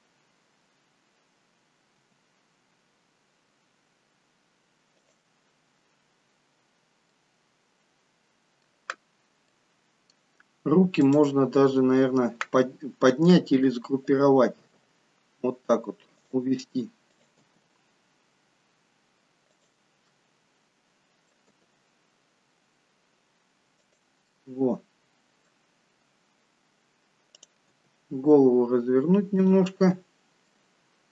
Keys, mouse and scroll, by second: 2.0 scroll up 2, 2.2 g, 7.2 middle click, 9.1-10.0 scroll up 3, 9.6 middle click, 11.1 click, 11.6-12.7 scroll down 2, 14.9 g, 17.2 click, 17.6 g, 20.2 middle click, 21.6 g, 24.5 middle click, 27.9 click, 27.9 g, 30.0 middle click.